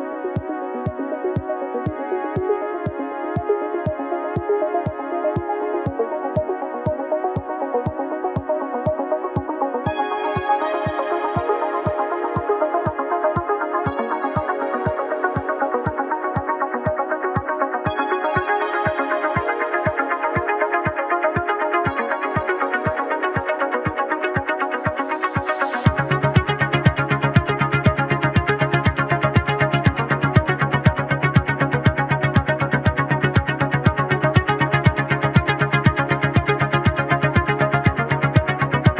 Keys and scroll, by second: 0.6 ctrl+z, 1.1 space, 3.1 ctrl+z, 5.2 space, 11.0 ctrl+shift+z, 15.2 ctrl+z, 18.5 space, 34.4 space.